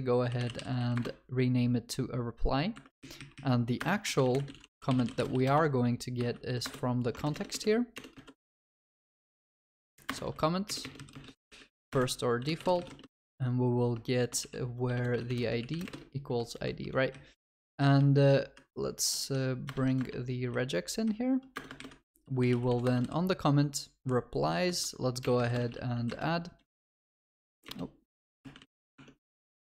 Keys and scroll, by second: 2.8 Escape, 6.9 Escape, 7.2 ctrl+BackSpace, 8.6 ctrl+BackSpace, 19.3 shift+F2, 19.7 alt+Return, 23.9 Return, 27.6 Return, 28.9 ctrl+BackSpace.